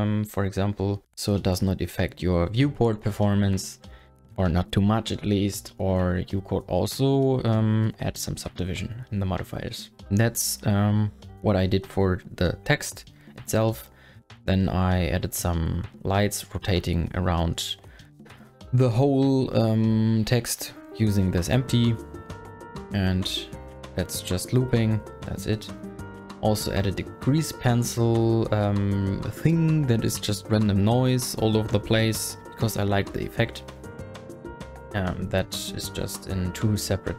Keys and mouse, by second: 13.8 click, 14.0 middle click, 15.6 click, 17.1 shift+click, 17.5 middle click, 17.6 click, 20.2 click, 20.6 click, 21.2 space, 22.4 space, 22.8 space, 23.1 click, 23.6 middle click, 24.4 KP_0, 25.8 space, 26.2 click, 26.8 click, 28.6 space, 33.8 click, 36.9 space.